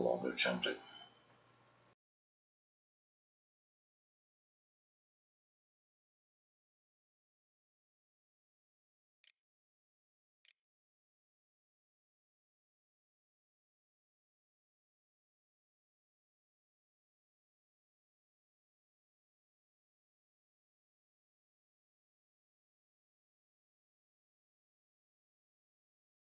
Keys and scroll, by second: 9.5 ctrl+a, 10.0 ctrl+s, 10.7 a.